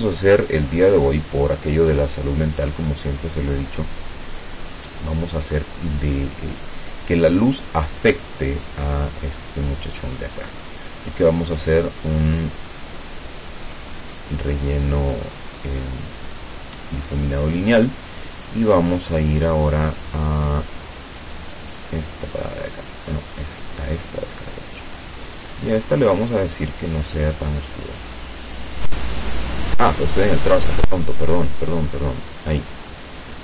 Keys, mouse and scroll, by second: 4.6 click, 11.6 click, 13.7 click, 19.3 click, 21.7 click, 23.7 click, 25.9 click, 26.9-28.6 drag, 30.4 click, 30.8 click, 33.2-33.4 drag.